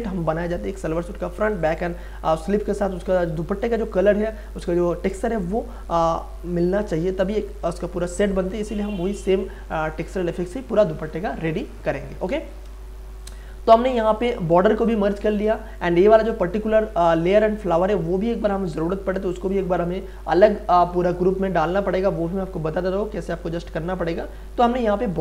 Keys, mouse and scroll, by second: 12.7 space, 13.2 ctrl+click, 15.3 ctrl+z, 15.5 ctrl+space, 15.8 ctrl+click, 16.0 ctrl+space, 17.2 click, 20.4 scroll up 1, 21.3-25.2 drag.